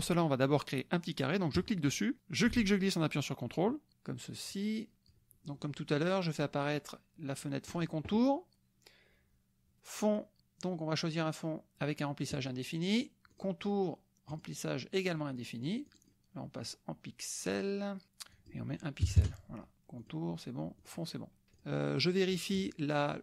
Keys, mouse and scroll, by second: 1.6 click, 2.4-3.9 ctrl+drag, 4.5 click, 7.7 click, 12.3 click, 13.3 click, 14.3 click, 14.9 click, 15.9 click, 18.3 click, 19.0 KP_1, 19.2 KP_Enter, 20.0 click, 20.8 click, 21.6 click, 21.9-22.9 middle drag.